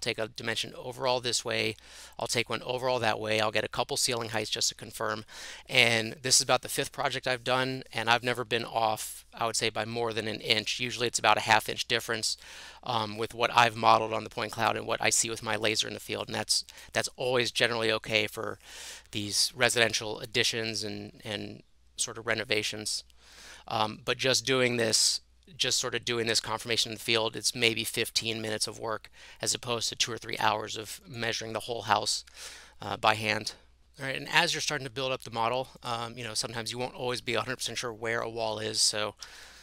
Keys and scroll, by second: 39.2 h, 39.3 h.